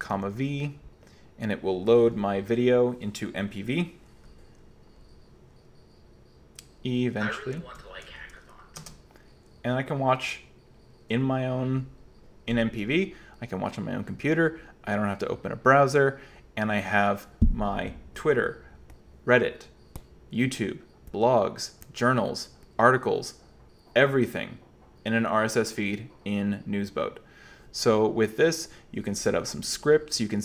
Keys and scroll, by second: 0.0-0.8 typing, 7.8 super+h, 8.8 space.